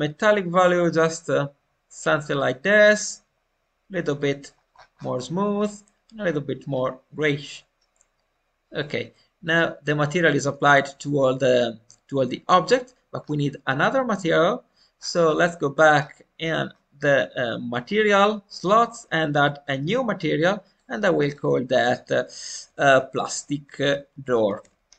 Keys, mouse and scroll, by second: 2.9-4.4 drag, 4.4 scroll down 2, 5.5 click, 5.5 scroll down 2, 9.0-10.6 middle drag, 10.6-11.0 scroll up 1, 11.0-13.1 middle drag, 13.1-13.6 scroll down 1, 14.9 scroll up 2, 16.2-16.6 scroll up 6, 19.4-24.9 drag, 19.4 scroll up 1.